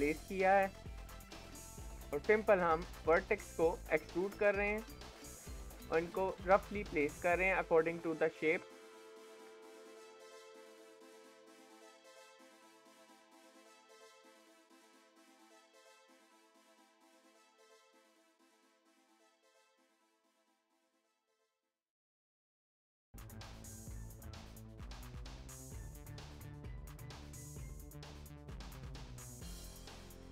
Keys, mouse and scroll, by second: 1.6 e, 2.0 g, 4.2 e, 5.1 e, 7.0 e, 7.8 e, 9.3 e, 10.0 e, 11.5 e, 12.3 e, 15.3 e, 16.0 e, 17.3-18.5 shift+middle drag, 18.5 e, 19.5 e, 21.8 e, 22.8 e, 25.1 e, 26.4 shift+middle click, 27.1 e, 28.1 e, 30.0 e.